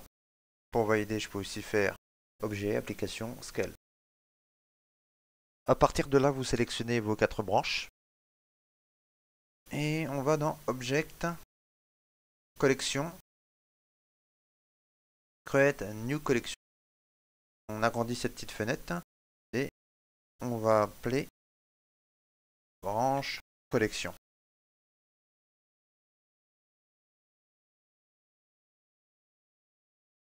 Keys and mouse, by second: 5.2 right click, 5.2 click, 5.2 shift+middle click, 5.6 ctrl+middle click, 5.8 middle click, 6.6 shift+middle click, 7.2 right click, 7.8-8.2 shift+right click, 8.9 shift+middle click, 8.9 right click, 9.3 ctrl+middle click, 12.2 click, 22.4 click, 24.9 BackSpace, 30.0 l.